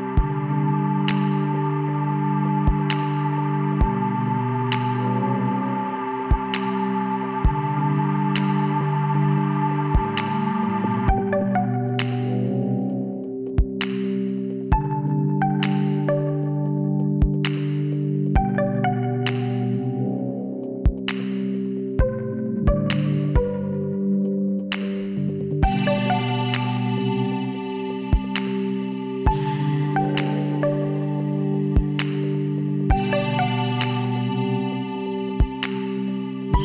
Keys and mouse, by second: 3.2-5.0 middle drag, 5.7 KP_7, 6.5-9.6 drag, 7.2 z, 8.2 b, 11.7-13.4 drag, 13.5-14.7 drag, 14.7 Tab, 15.4 z, 16.6 a, 17.5-18.7 middle drag, 20.6-21.6 middle drag, 22.4 Tab, 25.7 click, 26.5 shift+s, 28.0 shift+a, 30.0 s, 31.4 s, 33.5 KP_1, 34.2-35.9 drag.